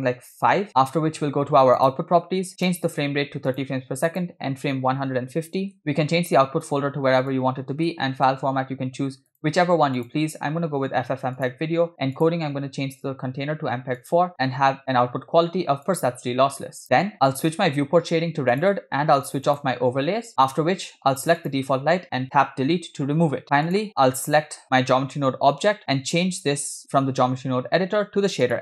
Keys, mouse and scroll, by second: 1.8 click, 2.6-3.7 drag, 4.1-5.8 drag, 6.6 scroll down 2, 7.3-8.4 drag, 8.2 /, 9.3-10.2 drag, 10.8 scroll down 2, 11.4 drag, 11.8 scroll down 1, 12.2-14.2 drag, 14.3-16.2 drag, 18.9 click, 19.5 click, 21.4 click, 22.7 Delete, 23.7 click, 25.8-28.6 drag.